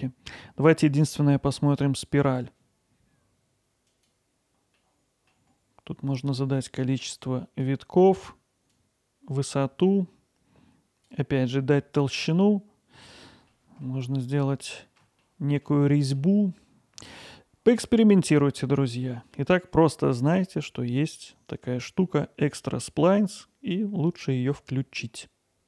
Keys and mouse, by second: 6.1-13.6 drag, 13.6 middle click, 14.6 alt+middle click, 16.0 middle click, 16.4 alt+middle click, 19.4 middle click, 19.9 alt+middle click, 22.1-23.2 middle drag.